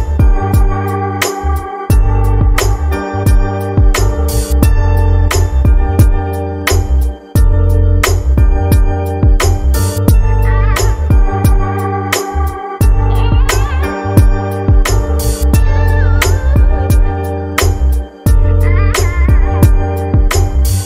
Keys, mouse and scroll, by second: 1.1-1.8 scroll down 2, 1.8-2.3 drag, 2.3-3.9 scroll down 10, 3.9-20.8 drag.